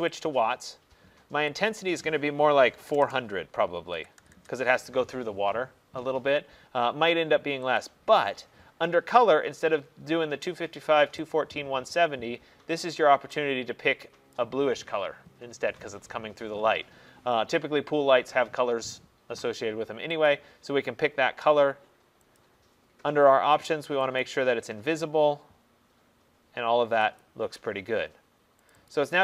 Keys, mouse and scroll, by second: 0.3 click, 1.8 click, 3.0-4.3 typing, 5.3 BackSpace, 7.9 click, 10.4 click, 12.8 click, 14.4 click, 20.3 click, 22.4 click, 24.3 click, 27.3 click, 28.8 click, 29.0 click.